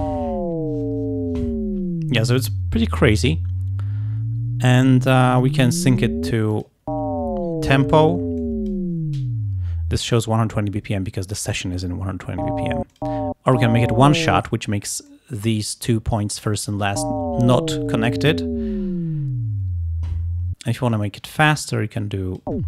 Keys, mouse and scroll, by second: 5.8 click, 6.6 click, 8.5 click, 13.0 click, 13.6 click, 15.2 click, 21.0-22.6 drag.